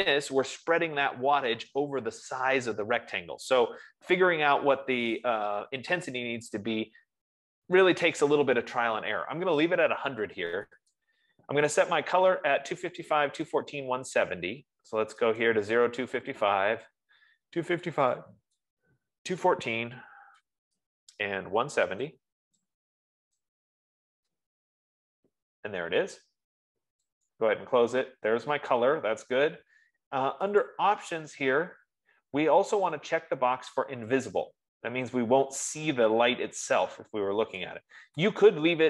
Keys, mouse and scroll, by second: 11.6 click, 14.0 click, 15.9 click, 18.5 click, 19.7 click, 20.1-21.1 typing, 22.6 click, 24.0 click, 24.1-24.8 typing, 25.0 Tab, 27.6 click, 28.6 F15, 31.2 click, 34.8 click, 37.8 click.